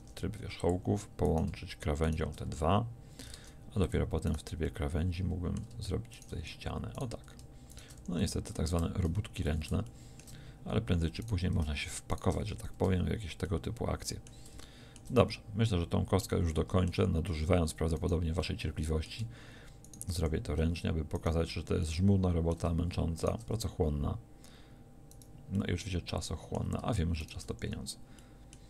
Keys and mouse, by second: 2.4 f, 3.3 ctrl+Tab, 6.4 f, 8.0 f, 8.2 a, 9.1 a, 9.5 a, 12.4 f, 12.9 a, 20.2 f, 23.5 f, 27.5 f, 27.7 a.